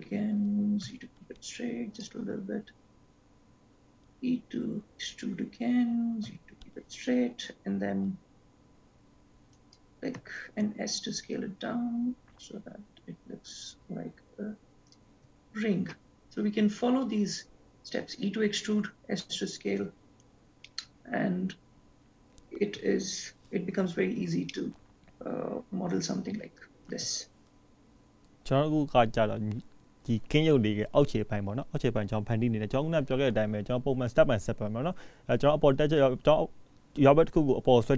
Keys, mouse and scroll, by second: 3.8 e, 10.3 s, 20.8 shift+middle click, 24.7 middle click, 25.7-27.2 scroll down 4, 30.4-33.2 scroll up 3, 33.2-34.0 scroll down 2, 34.2-34.6 scroll up 3, 36.4-37.9 scroll up 1.